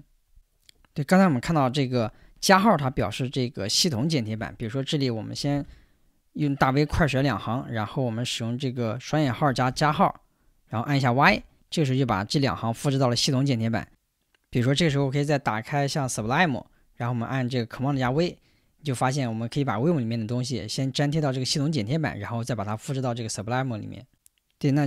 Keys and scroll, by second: 4.4 j, 5.5 shift+v, 7.0 j, 9.3 shift+', 11.3 y, 15.0 super+Tab, 16.0 super+Tab, 18.1 super+v.